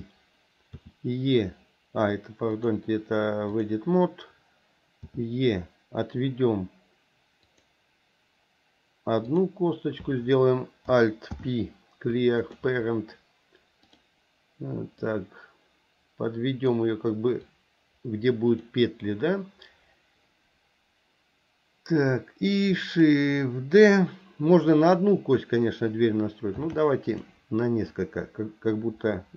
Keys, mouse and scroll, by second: 0.7 e, 2.5-3.8 drag, 9.3 click, 11.3 alt+p, 13.9 click, 15.1-16.8 drag, 17.4-18.6 drag, 26.6 shift+d, 27.9-29.3 drag.